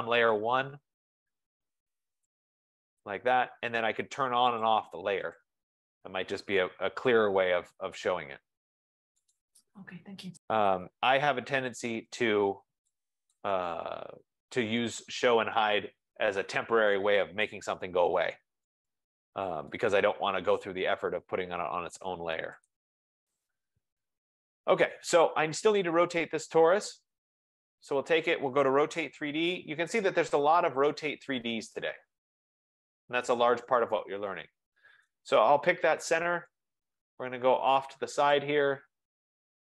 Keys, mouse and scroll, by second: 0.4 right click, 2.4 click, 4.9 click, 5.6 click, 9.4 right click, 12.2 click, 13.5 click, 18.9 right click, 19.9 right click, 22.8 click, 23.5 click, 25.9 click, 29.1-31.7 typing, 33.0 typing, 35.1 right click, 36.6 click, 38.4 click.